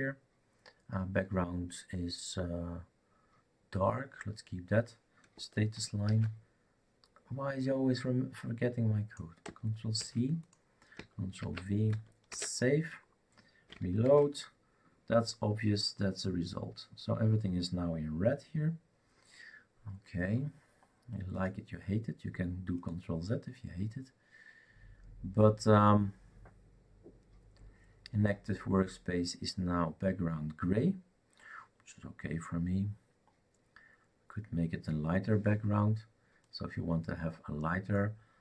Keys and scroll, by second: 6.0 ctrl+v, 9.9 ctrl+c, 11.4 ctrl+v, 12.3 ctrl+s, 14.1 shift+r.